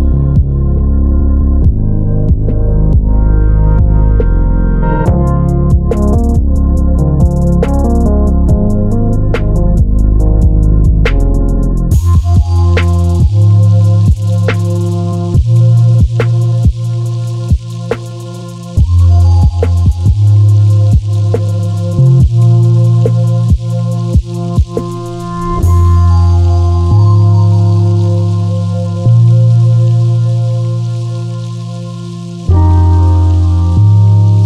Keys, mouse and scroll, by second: 1.2-1.6 scroll up 1, 1.9-3.0 drag, 3.0 scroll down 1, 5.7 shift+click, 6.4 middle click, 6.9 ctrl+shift+click, 7.2 middle click, 8.1 g, 9.0 Escape, 11.8-13.1 drag, 14.0 ctrl+z, 14.9 click, 15.2-15.5 scroll up 1, 15.5 middle click, 16.2 click, 17.9-18.5 scroll down 1, 18.5-20.4 middle drag, 19.4-21.3 typing, 22.1 Tab, 22.3 middle click, 23.6-29.9 middle drag, 24.4 scroll down 1, 29.9 shift+right click, 30.5 middle click, 31.3 KP_7, 31.5-32.6 middle drag, 32.1 shift+z, 32.6 shift+right click, 32.9-34.4 middle drag, 33.8 KP_3.